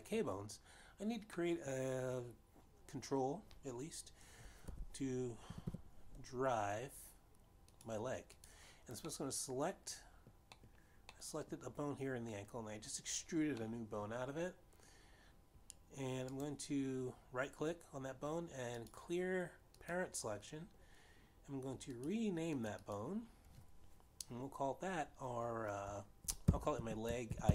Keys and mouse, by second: 0.3 click, 1.0 middle click, 2.7 middle click, 6.8 e, 6.8 y, 7.0 y, 8.9 click, 9.8 click, 10.4 middle click, 11.9 middle click, 12.7 middle click, 15.2 middle click, 18.1 right click, 20.1 click, 21.2 click, 23.4 click, 24.0 click.